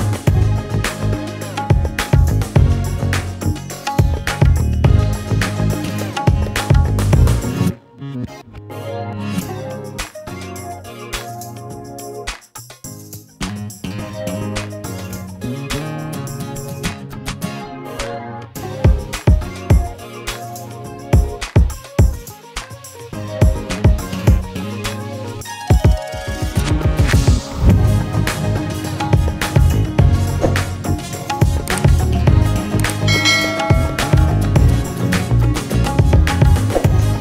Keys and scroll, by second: 0.5 ctrl+space, 28.9 ctrl+a, 32.4 ctrl+space, 32.9 ctrl+a.